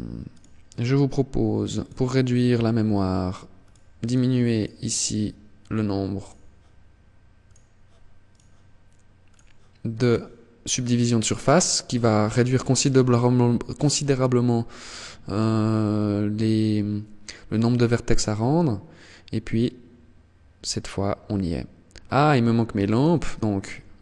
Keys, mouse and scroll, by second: 0.9 click, 2.7 click, 3.1 click, 3.6 click, 5.3 right click, 6.5 click, 7.4 right click, 8.5 click, 9.1 right click, 10.1 click, 13.8 click, 21.2 shift+click.